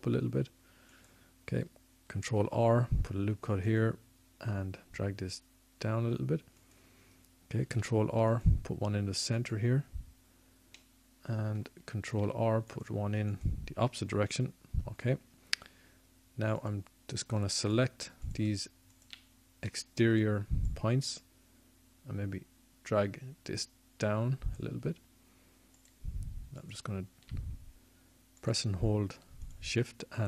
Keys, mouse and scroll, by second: 0.3 s, 1.9 ctrl+r, 2.9 ctrl+r, 7.3 ctrl+r, 12.7 ctrl+r, 15.7 click, 16.3-18.4 middle drag, 17.0 ctrl+r, 18.4-20.0 drag, 25.5-27.4 middle drag.